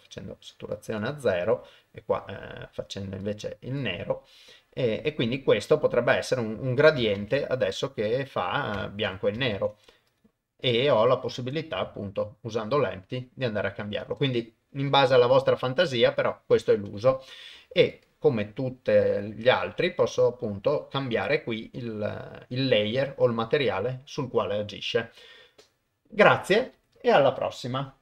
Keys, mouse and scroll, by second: 0.8 click, 1.4 click, 7.2 ctrl+Tab, 7.7 click, 9.5 ctrl+Tab, 10.7 click, 11.7 g.